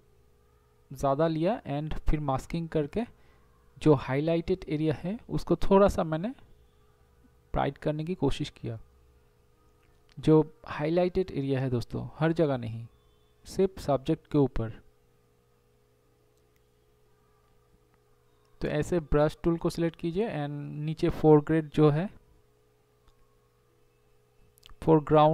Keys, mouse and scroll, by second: 0.1 [, 0.7 ], 8.4 [, 9.8 ], 10.8 ], 12.6 [, 13.5 [, 14.5 ], 16.0 ], 18.4 ctrl+0, 19.2 ], 25.2 ].